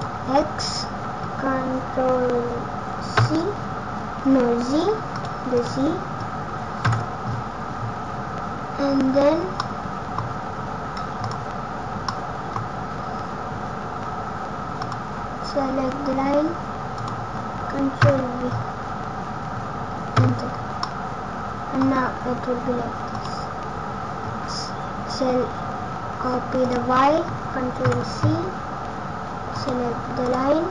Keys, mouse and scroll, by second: 5.5 click, 12.0 middle click, 12.5-12.9 scroll up 1, 13.2 scroll down 1, 14.7 click, 16.9 click, 20.7 middle click, 23.0 click, 26.5 click, 30.2 click.